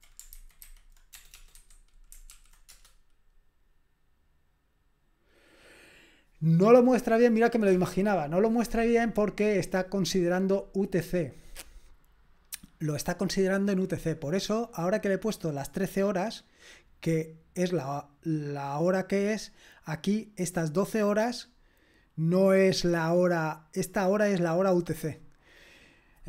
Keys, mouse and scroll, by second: 0.3 alt+b, 0.6 alt+b, 1.2-2.8 typing, 16.0 click, 16.3 click, 18.5 click, 20.2-21.5 drag.